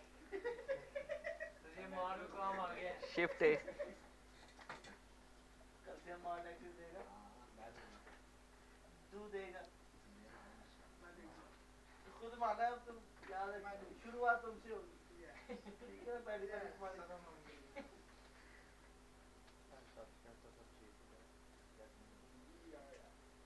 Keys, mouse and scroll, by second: 0.4-1.1 scroll down 1, 1.1 click, 2.2 middle click, 3.5 shift+a, 5.5 click, 5.9-6.6 scroll down 1, 6.6 s, 7.6 click, 8.3 z, 9.1 middle click, 10.5 click, 12.9 click, 13.3 scroll down 1, 13.8-15.5 middle drag, 15.5-17.3 drag, 17.3-19.6 drag, 19.6-23.4 drag.